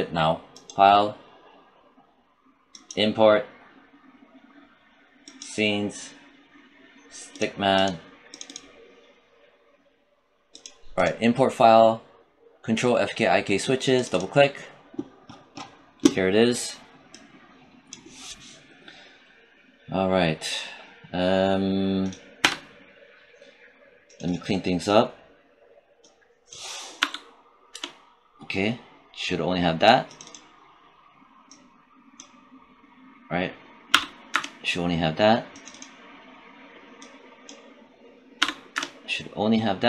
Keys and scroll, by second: 22.3 space, 26.8 BackSpace, 27.6 Return, 33.8 BackSpace, 34.2 Return, 38.2 BackSpace, 38.6 Return.